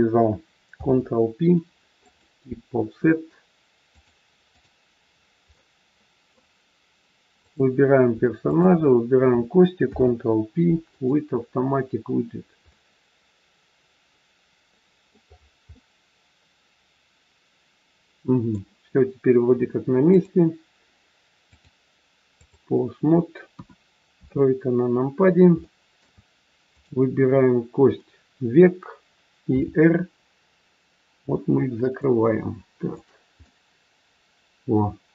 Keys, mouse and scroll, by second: 0.8 ctrl+p, 3.8 click, 5.0 scroll down 3, 5.5 middle click, 7.4 click, 8.4 shift+click, 9.8 ctrl+p, 12.3-12.8 scroll down 3, 12.8 middle click, 15.3-15.9 scroll up 5, 15.6 middle click, 19.4-20.0 scroll down 3, 20.0 click, 21.4 click, 23.4 KP_1, 24.0 KP_3, 25.2-25.5 scroll up 3, 25.6 shift+middle click, 26.8 click, 29.5 r, 32.7 click, 33.4 middle click.